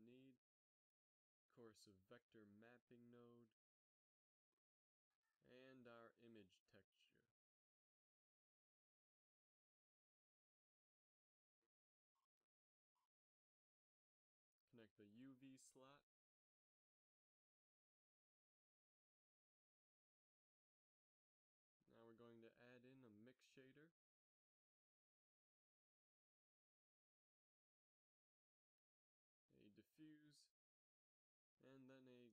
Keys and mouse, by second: 2.0 g, 2.8 shift+a, 7.7 shift+a, 16.7 click, 20.5 g, 21.5-22.0 middle drag, 22.6-23.3 drag, 22.8 g, 23.7 shift+a, 27.4 g, 28.6 drag, 29.9 shift+a.